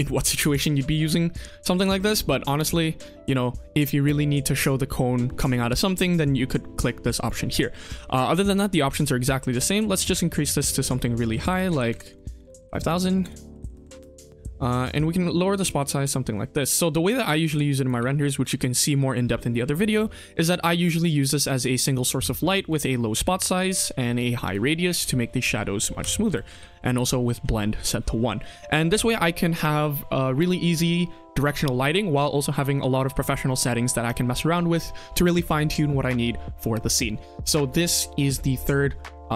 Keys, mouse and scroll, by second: 0.4 shift+middle drag, 1.8 ctrl+s, 7.2 click, 12.3-13.9 drag, 12.3-13.6 typing, 14.9 click, 15.6 KP_1, 15.9 r, 16.6 click, 17.0 click, 17.4 r, 17.8 g, 18.6 middle drag, 19.9-20.3 scroll down 2, 20.3 scroll up 2, 20.4 KP_1, 20.7-22.6 scroll down 2, 22.6-23.6 drag, 24.1 click, 24.7-25.1 middle drag, 25.3 KP_1, 25.6-25.9 scroll up 1, 25.9 r, 26.4 g, 27.2 middle drag, 27.9-28.5 scroll up 1, 28.5 KP_1, 28.7-30.5 scroll down 2, 30.5-31.1 scroll down 1.